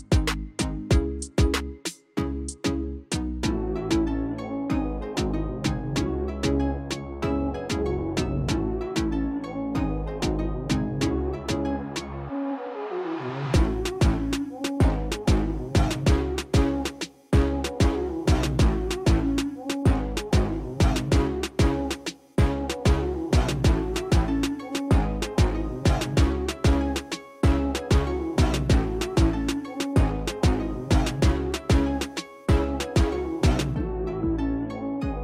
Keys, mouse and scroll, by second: 0.1 super+click, 6.1-6.9 super+drag, 9.1 super+click, 10.0 super+click, 10.7 super+click, 12.0 super+click, 15.7 super+click, 16.5 super+click, 17.3 KP_4, 17.7 Return, 21.6 d, 25.6 a, 32.0 d.